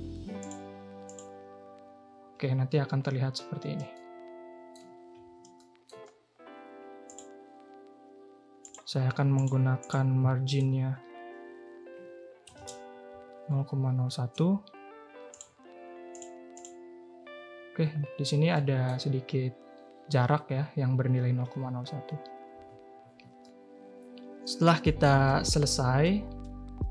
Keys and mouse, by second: 0.5 click, 4.0 shift+middle click, 5.5 shift+middle click, 7.0-15.3 drag, 16.1-16.6 drag, 18.5 middle click, 22.5 Tab, 23.0 a, 23.1 a, 23.4-24.4 drag, 24.8 shift+drag.